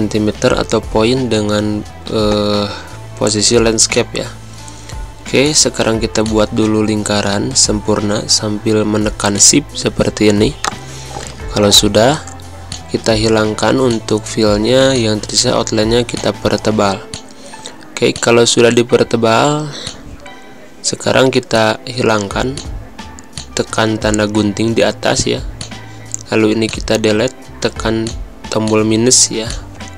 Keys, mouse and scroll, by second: 3.9 click, 9.3 click, 12.6 click, 24.5 Delete, 25.5 click, 26.6 click.